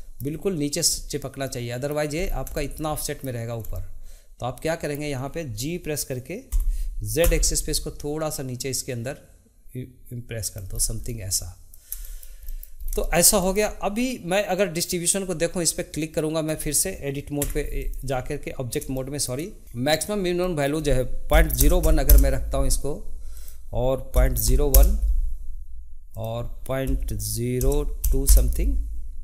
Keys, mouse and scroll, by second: 0.0-2.2 shift+middle drag, 2.5-6.5 shift+middle drag, 11.1-12.7 middle drag, 13.1 shift+middle click, 14.6-16.4 drag, 17.4 Tab, 17.8 click, 18.9-19.9 shift+middle drag, 19.9-23.0 drag, 23.3-29.2 drag.